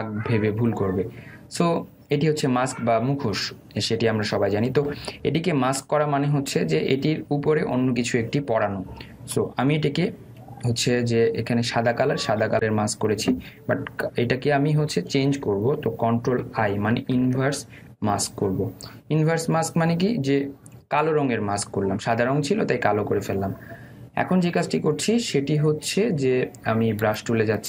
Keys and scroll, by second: 18.0 ctrl+i.